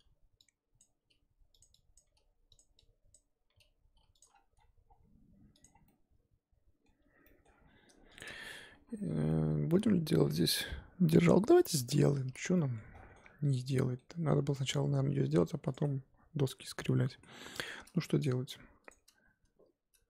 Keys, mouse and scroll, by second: 0.0-0.4 scroll up 1, 0.8 click, 1.0 g, 1.9 click, 2.0 g, 3.1 click, 3.5 g, 4.3-5.6 scroll down 8, 5.6 click, 5.8-7.5 middle drag, 7.5-8.2 scroll up 4, 8.2 click, 8.7 KP_7, 9.3 middle click, 9.9-11.1 scroll up 4, 11.1 middle click, 11.6 scroll up 4, 12.1 Tab, 12.5 middle click, 13.1 3, 13.5 scroll down 2, 13.7-15.7 middle drag, 15.7 click, 15.8-18.2 middle drag, 18.2 click, 18.9 shift+click.